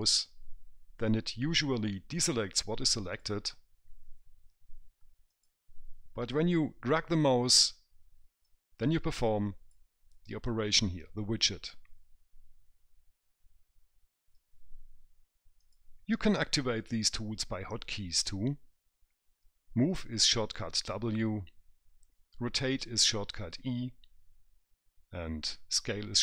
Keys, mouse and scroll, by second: 3.4 click, 5.7 click, 8.8 click.